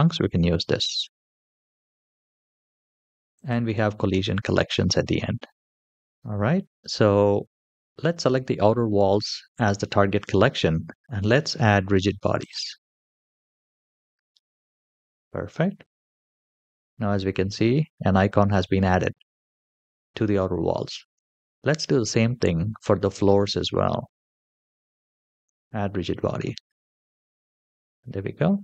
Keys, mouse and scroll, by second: 0.3-1.1 scroll down 1, 3.2 click, 4.3-5.9 scroll down 1, 5.9 click, 7.8 click, 12.2 click, 14.6-15.2 scroll down 1, 15.2-16.2 scroll down 2, 16.3-17.4 scroll up 1, 17.4-17.8 scroll up 1, 21.6 click, 23.3-24.0 scroll down 1, 24.0-25.2 scroll down 3, 25.2 click, 27.0-27.6 scroll up 1, 27.6-28.3 scroll up 1.